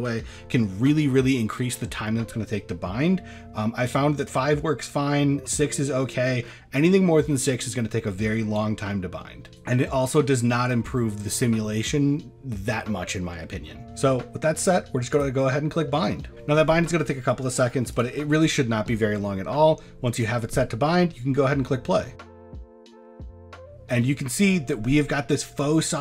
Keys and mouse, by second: 17.9 click, 22.3 click.